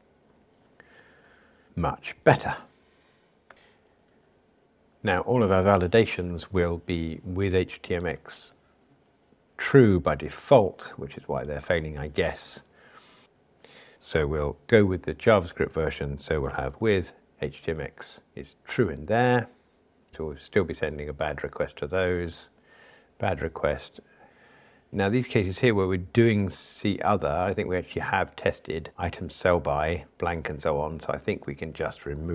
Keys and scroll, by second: 19.2 Return, 20.1 super+z.